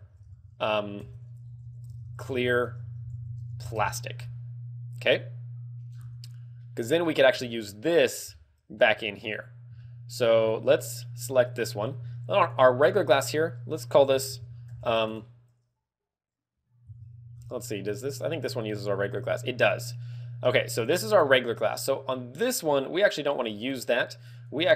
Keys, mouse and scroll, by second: 5.8-6.2 scroll down 4, 6.5 middle click, 7.4 shift+middle click, 8.3 scroll up 6, 8.7 shift+middle click, 9.1 scroll down 3, 9.7 shift+middle click, 11.3 right click, 12.3 click, 13.2 click, 18.4 right click, 20.7 click, 22.6 right click, 23.2 right click, 24.3 click.